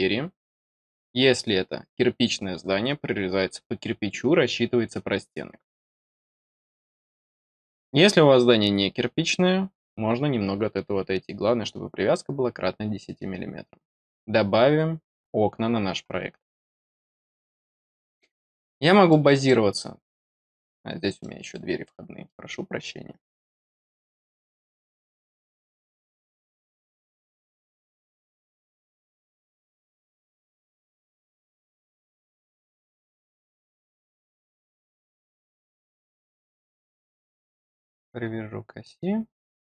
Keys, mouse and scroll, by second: 16.6 middle click, 17.5 middle click, 18.5 middle click, 19.4 middle click, 20.7-21.1 scroll down 2, 21.1 middle click, 21.7-22.2 scroll down 2, 22.7-23.6 scroll up 2, 23.6 scroll down 2, 24.5 scroll up 2, 25.0 click, 25.7-26.1 scroll up 4, 27.6 click, 28.3 scroll up 2, 29.2 click, 29.8-30.1 scroll down 2, 30.1 middle click, 30.6 scroll up 2, 30.9 scroll down 2, 37.4 click.